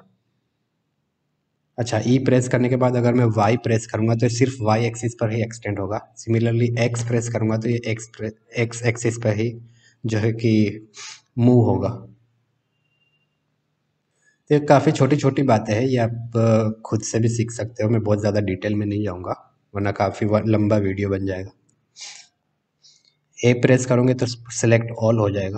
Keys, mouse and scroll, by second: 14.8 middle click, 22.0 middle click, 24.9 a.